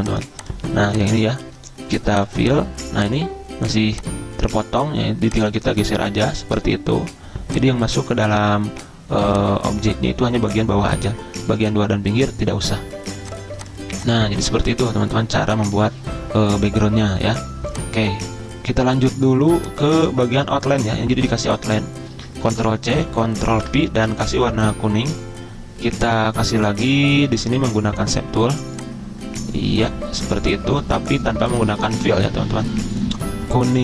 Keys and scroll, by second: 15.0 ctrl+z, 22.4 ctrl+c, 23.6 ctrl+v.